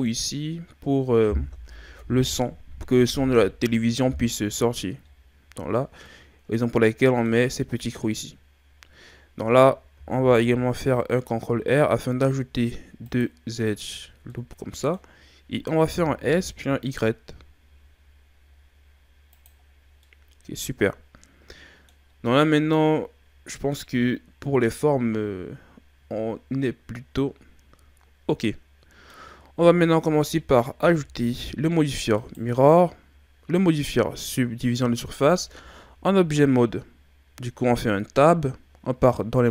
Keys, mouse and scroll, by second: 5.8 scroll down 1, 6.1-9.1 middle drag, 10.0 ctrl+r, 14.3-15.8 middle drag, 15.8 s, 19.7 scroll down 2, 20.1-23.0 middle drag, 32.2 right click, 35.0 Tab.